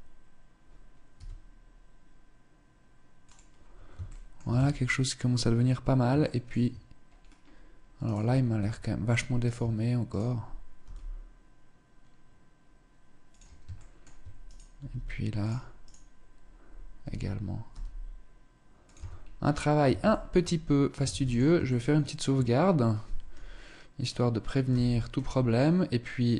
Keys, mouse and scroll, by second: 0.6 s, 3.5 shift+middle click, 3.9 Tab, 5.7 shift+middle click, 6.5-7.2 scroll up 3, 7.5 right click, 7.7 Tab, 8.0 Tab, 8.9 right click, 9.0 Tab, 9.5 right click, 10.2 g, 13.2 shift+middle click, 13.9 right click, 14.2 g, 14.9 click, 15.2 right click, 16.4 r, 18.4 Tab, 18.6-19.2 scroll down 3, 19.4 ctrl+s, 20.5 ctrl+s, 21.2 shift+middle click, 24.2 KP_0, 25.8 right click.